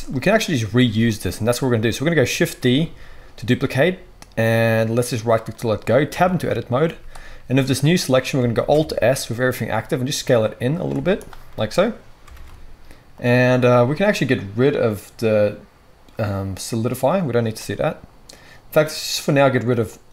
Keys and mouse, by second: 2.6 shift+d, 5.3-10.8 drag, 6.1 Tab, 6.8 z, 8.5 alt+s, 10.8-17.1 shift+middle drag, 10.9 z, 12.3 alt+s, 17.1-20.1 drag.